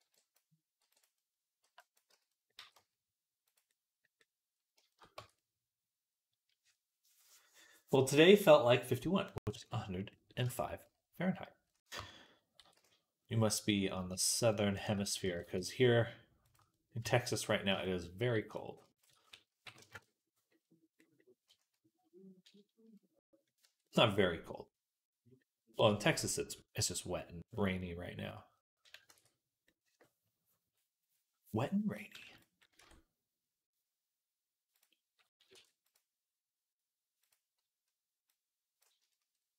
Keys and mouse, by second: 0.6 b, 1.9 z, 2.4 g, 5.0 Tab, 9.4-11.2 right drag, 11.5-23.5 right drag, 11.8 Tab, 12.4 r, 15.1 g, 16.8 Tab, 17.5 Tab, 19.1 s, 23.5 Tab, 23.5-25.4 drag, 25.4-39.5 right drag, 29.0 ctrl+s, 32.7 Tab, 34.6-37.2 drag, 35.4 ctrl+r, 38.2-39.5 drag.